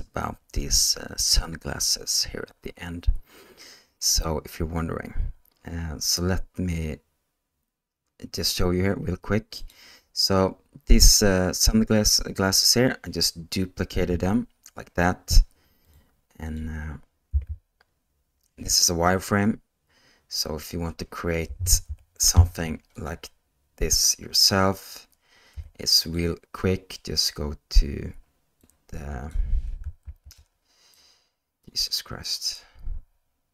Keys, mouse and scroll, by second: 9.6 click, 13.9 g, 16.5 click, 17.3 h, 21.9 alt+h, 22.9 click, 24.3 click, 25.5 h, 26.0 click, 28.6 click, 30.1 ctrl+z, 30.9 click, 32.2-32.8 drag.